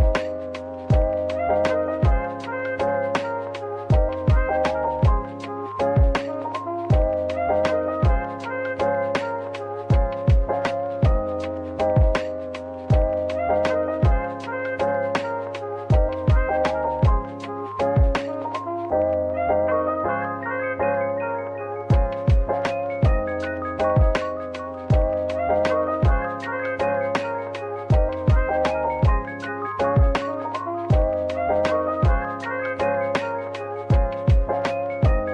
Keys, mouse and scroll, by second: 0.1-1.2 typing, 2.9 middle click, 4.5-5.4 typing, 7.3-8.3 typing, 16.4 scroll down 1, 17.4 typing, 17.5 scroll up 1, 18.9 typing, 29.6 typing.